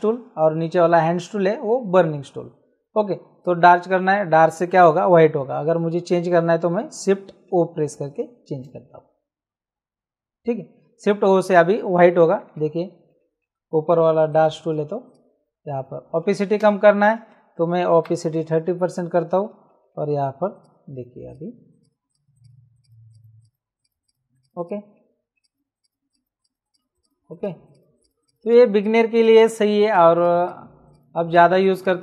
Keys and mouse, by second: 3.4 click, 7.4 shift+o, 14.3 click, 16.6 ctrl+z, 18.0 KP_3, 20.5 click.